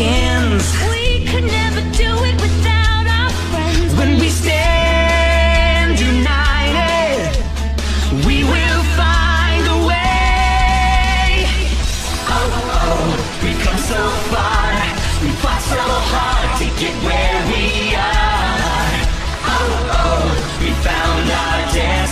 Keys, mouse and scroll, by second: 0.7-3.3 middle drag, 3.4-6.5 middle drag, 11.9-14.0 drag, 17.3 Print, 19.7-20.9 drag.